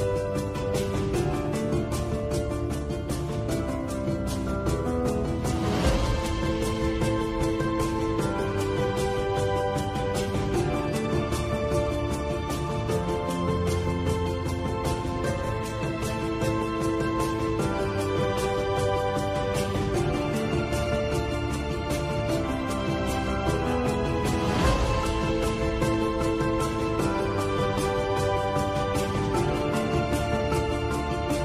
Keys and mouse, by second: 0.1 Tab, 0.5-1.7 middle drag, 2.5-4.4 middle drag, 4.8 middle click, 5.7-6.7 middle drag, 7.1-8.2 middle drag, 8.5 middle click, 10.0 KP_7, 13.0 shift+middle click, 15.5 g, 23.7 shift+a, 29.5 shift+middle click.